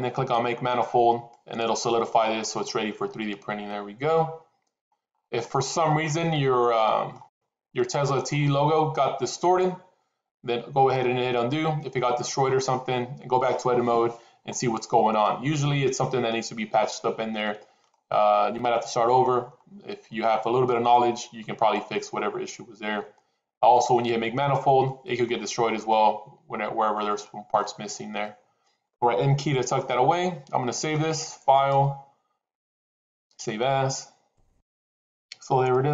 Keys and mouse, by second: 1.2 click, 2.5-4.8 middle drag, 5.3-6.0 middle drag, 6.6-7.0 middle drag, 7.7 middle click, 15.1-15.5 middle drag, 17.8-19.1 middle drag, 20.3 middle drag, 23.4 click, 24.7-25.1 middle drag, 25.7-27.5 middle drag, 28.2 middle click, 29.8 n, 31.4-33.1 drag, 34.9-35.9 middle drag.